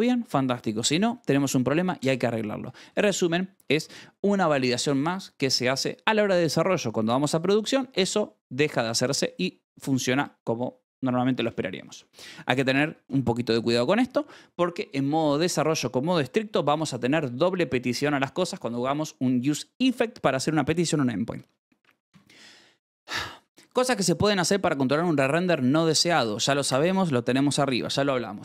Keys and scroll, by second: 2.4-4.3 typing, 8.9 Escape, 9.7 j, 11.7-12.7 typing, 12.8 Escape, 21.3 Escape, 21.5-22.5 typing, 24.3 Escape.